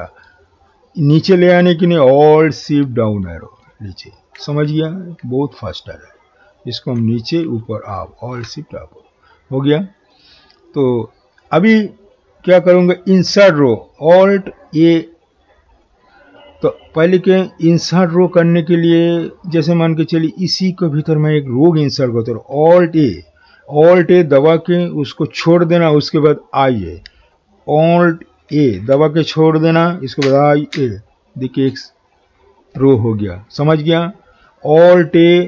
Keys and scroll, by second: 28.5 alt+a.